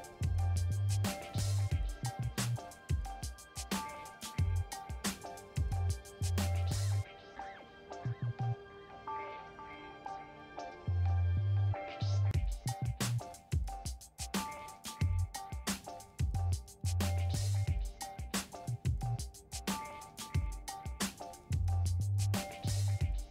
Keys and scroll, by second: 0.4-4.5 typing, 6.0 Return, 16.6 space.